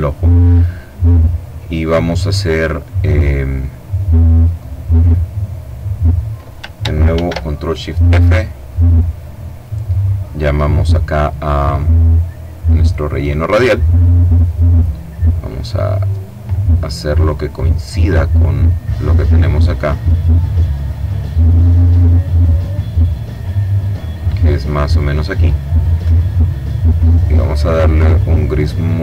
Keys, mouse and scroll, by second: 3.0 click, 3.5-4.9 middle drag, 6.9 ctrl+shift+f, 8.9-9.9 drag, 12.1 click, 13.1 click, 15.4 click, 18.3-21.9 drag, 22.4-25.2 drag, 26.4-29.0 drag.